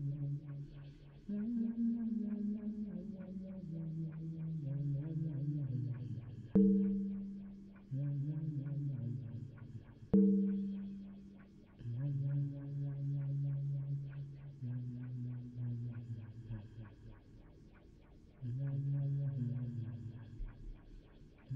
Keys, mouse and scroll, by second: 0.0 d, 4.4 a, 4.6 a, 16.8 u.